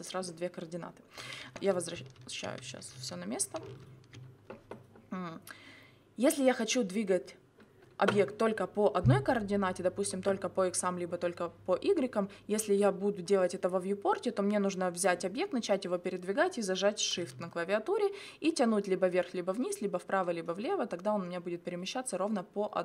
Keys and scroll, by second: 1.4 ctrl+z.